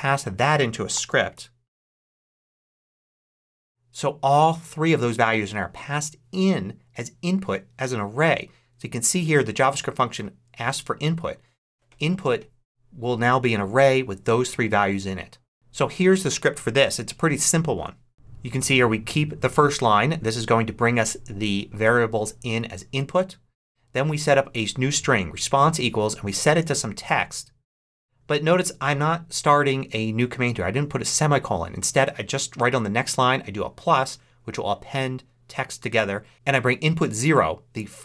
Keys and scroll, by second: 0.8 j, 1.1 a.